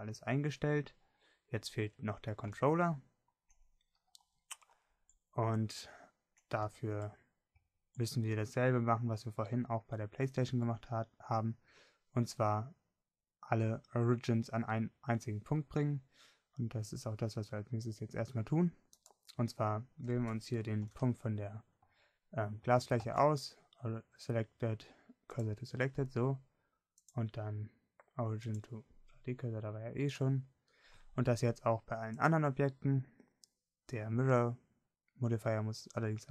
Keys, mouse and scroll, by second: 24.3 shift+s, 28.2-36.3 drag.